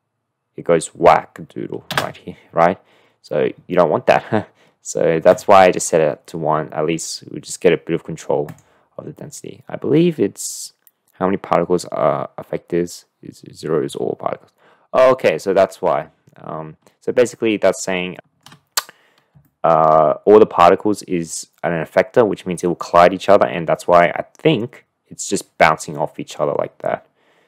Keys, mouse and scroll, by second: 3.5 space, 5.5 click, 8.5 drag, 17.7 click, 17.8 middle click, 19.4-19.8 shift+middle drag.